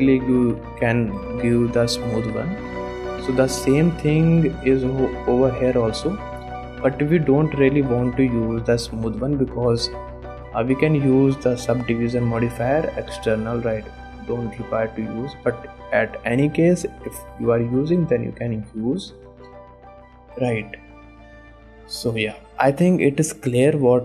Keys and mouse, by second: 1.2 click, 2.5 x, 3.0 shift+click, 3.8 shift+click, 4.4 click, 4.7 click, 5.0 shift+click, 6.1 click, 6.5 click, 6.9 shift+click, 8.6 click, 9.2 click, 12.0-13.9 drag, 17.5 middle click, 18.2 shift+middle click, 19.7 shift+middle click, 20.5 middle click, 21.6 middle click, 22.3 shift+middle click.